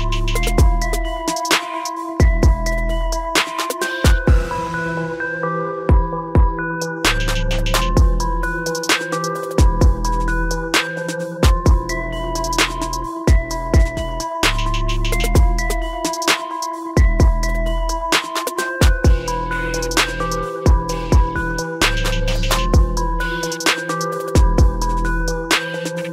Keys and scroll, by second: 20.2 ctrl+shift+i.